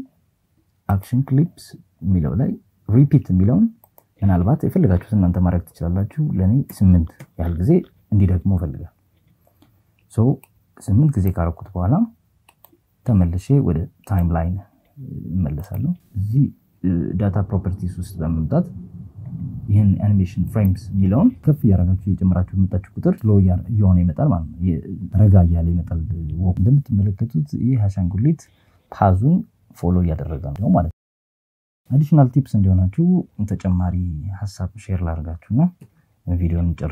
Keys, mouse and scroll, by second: 2.8-7.3 drag, 9.4-10.5 drag, 11.4-12.7 drag, 13.0-14.7 drag, 16.1 click, 17.4 click, 17.8 click, 20.6 click, 27.3 click, 28.3 click, 32.8 KP_1, 34.4 KP_7, 36.8 click.